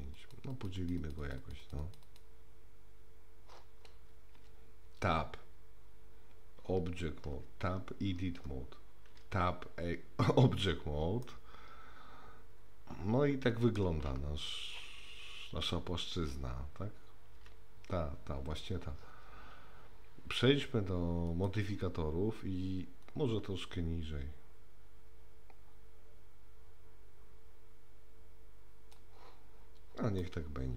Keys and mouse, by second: 0.2 click, 0.5 click, 0.7 click, 1.0 click, 1.2 click, 1.6 click, 4.4 Tab, 7.4 Tab, 9.1 Tab, 11.2-13.7 middle drag, 17.4 Tab, 19.1 Tab, 21.4 click, 23.0-29.0 drag, 30.2-30.7 middle drag.